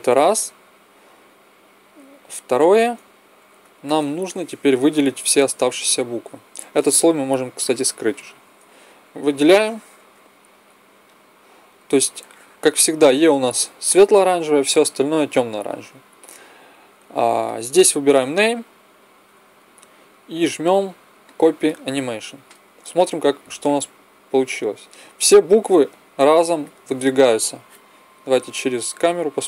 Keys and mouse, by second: 2.7 KP_1, 7.4-9.3 drag, 8.9 b, 12.0 click, 19.9-21.1 middle drag, 22.8 click, 23.5-25.2 drag, 27.2 KP_0, 28.8-29.4 middle drag.